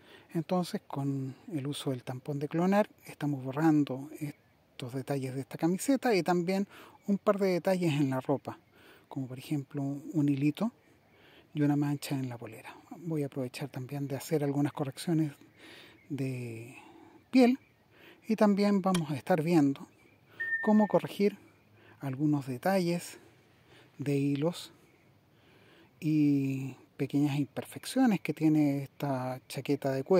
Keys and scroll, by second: 4.4 super+z.